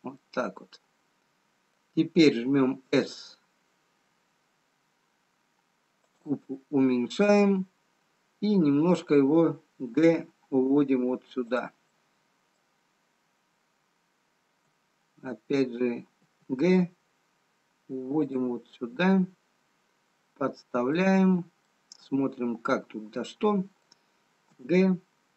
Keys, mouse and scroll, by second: 0.1 scroll down 2, 1.2 middle click, 6.7 middle click, 9.9 g, 12.0 middle click, 13.2-14.4 scroll up 3, 14.4-15.8 scroll up 1, 15.8 f, 16.3 g, 20.5 middle click, 25.0 g.